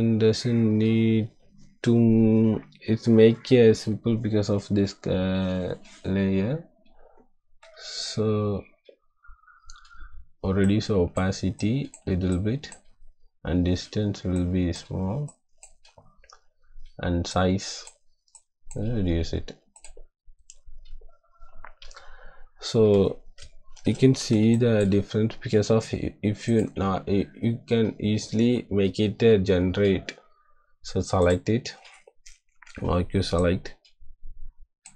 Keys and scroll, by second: 23.7 =, 24.3 space, 32.5 m.